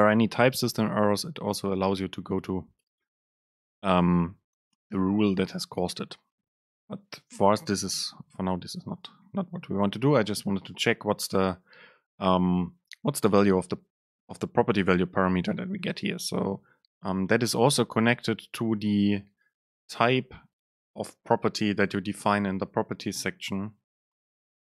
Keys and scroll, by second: 16.0 Right.